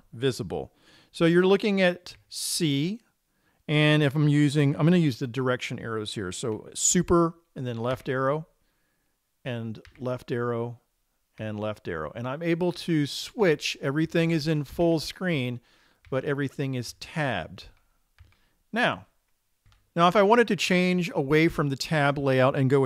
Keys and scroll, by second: 8.4 super+Left, 10.4 super+Left, 11.9 super+Left, 15.3 super+Left, 15.8 super+Left, 16.5 super+Left, 17.3 super+Right, 18.7 super+Right.